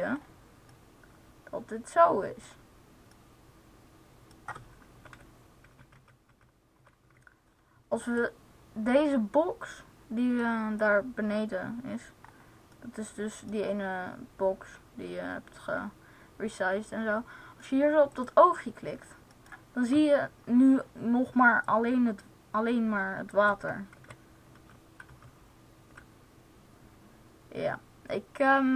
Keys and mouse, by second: 5.0 Right, 5.6 Down, 5.9 Left, 6.1 Left, 6.5 Left, 6.6 Right, 7.1 Left, 10.5-12.2 drag, 12.1 middle click, 13.5 click, 18.0-19.6 drag, 21.7-23.9 drag, 23.9 Right, 24.9 Left, 25.2 Left, 25.6 Right.